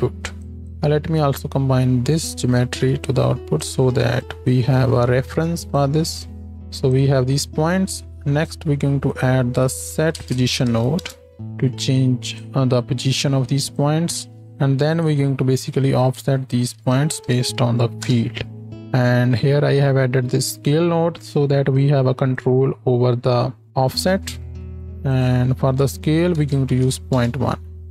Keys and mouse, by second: 3.5 click, 4.2 click, 6.5 shift+Right, 6.5 shift+Left, 8.0 shift+a, 12.4 click, 15.2 click, 15.2 x, 18.7-21.7 drag.